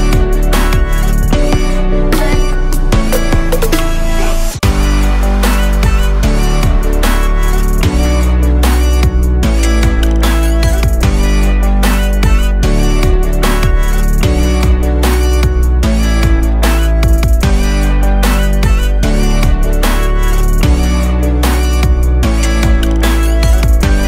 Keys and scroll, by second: 9.2 super+d, 10.1 super+d, 11.2 super+d, 12.2 super+d.